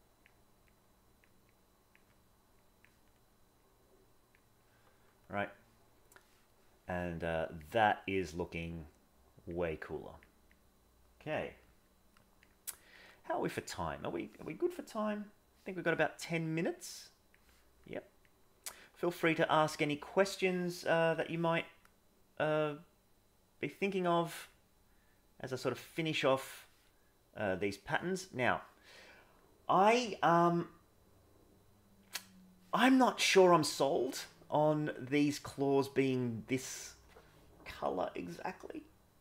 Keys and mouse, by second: 0.6 click, 1.5 click, 2.6 click, 3.5 click, 6.0 middle click, 7.6 click, 8.7 click, 9.9 click, 10.6 click, 12.5 click, 13.7 click, 16.8 click, 18.2 click, 19.8 middle click, 22.4-23.6 drag, 24.5-25.7 drag, 26.5-32.6 middle drag.